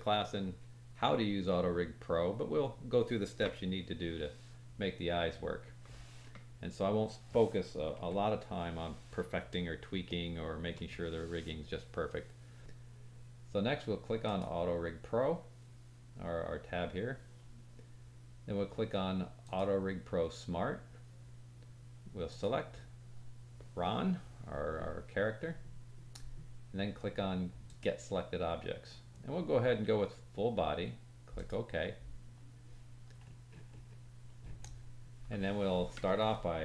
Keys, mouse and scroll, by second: 7.9 KP_1, 10.2-10.7 shift+middle drag, 14.2 click, 19.4-22.4 drag, 23.1-33.2 drag, 27.6-33.2 middle drag, 27.6-33.2 right drag, 33.2-34.2 scroll up 4, 33.3 click, 33.3 middle click, 33.3 right click, 34.2 scroll down 1.